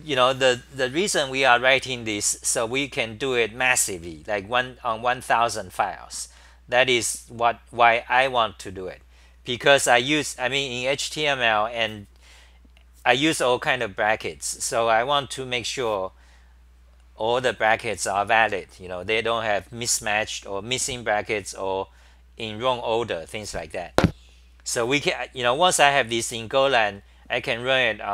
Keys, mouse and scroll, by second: 0.1-1.7 scroll down 10, 0.1 c, 1.7 c, 2.0 h, 2.6 c.